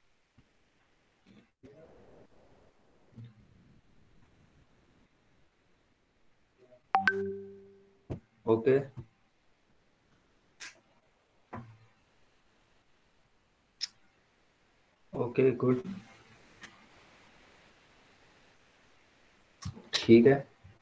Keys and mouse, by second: 20.3 click.